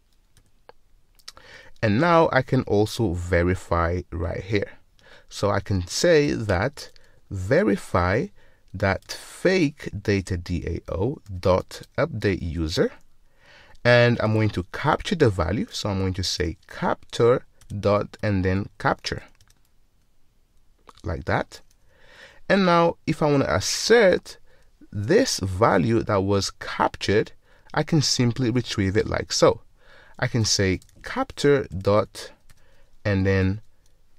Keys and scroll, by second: 7.9 Return, 9.1 Return, 17.7 Return, 31.8 Return.